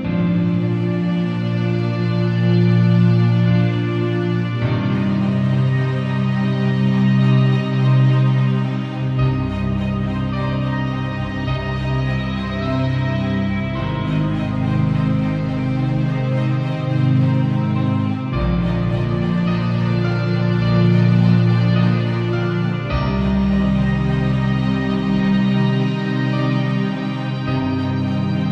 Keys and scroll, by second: 2.3 b, 2.7 [, 3.4 ], 6.2 [, 8.6 z, 10.9 space, 12.7 b, 13.6 ], 14.5 alt+super+], 14.6 super+[, 22.5 [, 24.2 ], 27.5 e.